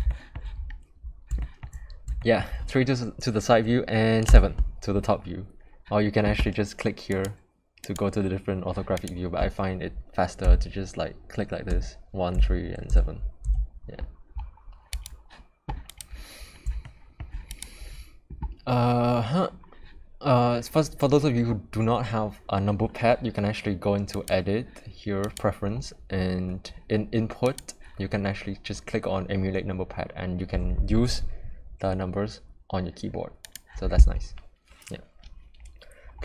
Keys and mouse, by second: 0.1 shift+middle click, 1.4 shift+middle drag, 2.2 shift+middle click, 4.3 KP_7, 7.1 click, 10.4 KP_1, 11.7 KP_3, 12.3 KP_1, 12.9 KP_7, 13.4 KP_1, 14.9 click, 15.9 click, 16.8-17.2 shift+middle drag, 17.5 click, 24.1-25.4 drag.